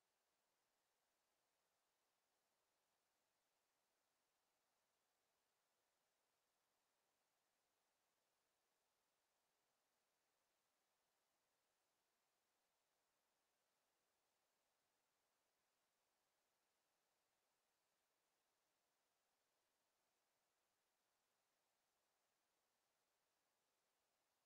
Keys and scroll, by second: 19.6 r.